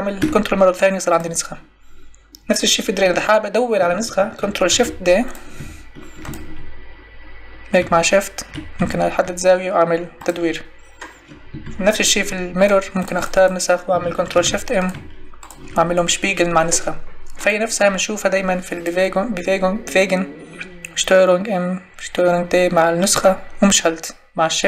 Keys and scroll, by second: 4.7 ctrl+shift+d, 14.3 ctrl+shift+m.